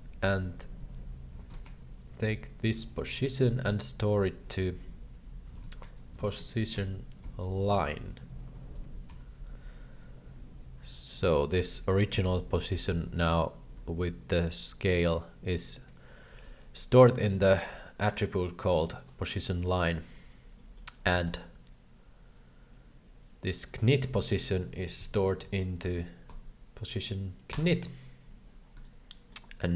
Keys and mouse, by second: 0.4-4.1 drag, 4.5-10.2 drag, 8.3 BackSpace, 10.2 BackSpace, 10.9 click, 14.4-16.4 shift+drag, 19.3 middle click, 19.8 middle click, 20.2 middle click, 20.5 middle click, 21.2 shift+middle drag, 22.4-22.7 drag, 23.3 click, 23.6-28.3 drag, 28.9 shift+middle click.